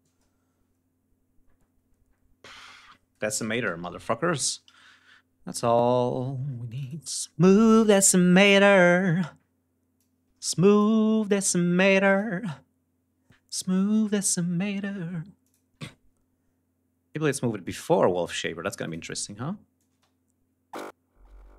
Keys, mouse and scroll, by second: 2.9-4.1 typing, 6.4 click, 7.5 click, 9.7 click, 11.5 click, 15.1 click, 17.3 click, 18.5 click, 19.5-21.5 drag, 19.6 space.